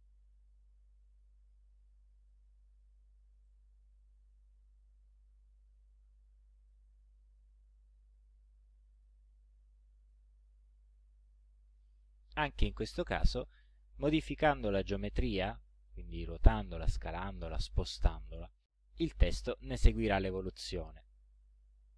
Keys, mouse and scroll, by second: 1.1 click, 2.3 click, 3.5 click, 4.7-5.9 drag, 6.7 click, 9.0 click, 10.1 click, 13.1-14.3 drag, 18.7 click, 21.0-21.9 drag.